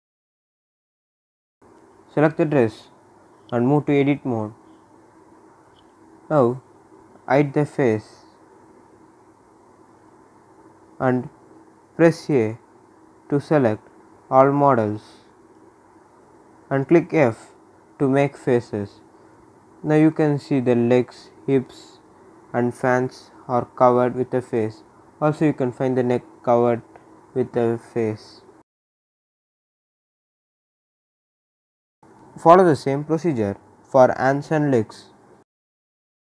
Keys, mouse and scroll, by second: 1.2-3.4 drag, 5.4 scroll up 1, 6.5-12.9 drag, 12.9 scroll down 1, 13.7-15.0 drag, 15.0 a, 15.9 f, 17.2 click, 18.2 right click, 18.4 scroll up 1, 19.5-22.3 drag, 22.3 scroll down 1, 22.6-25.0 drag, 27.2-28.2 scroll down 1, 28.3 click, 30.9 shift+click, 34.8 shift+click.